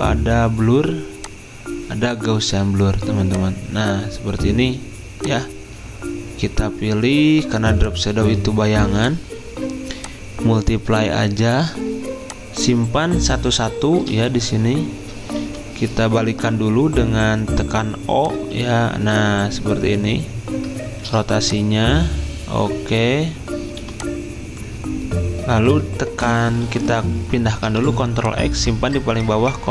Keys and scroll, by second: 26.7 ctrl+x, 27.6 v, 28.8 ctrl+z.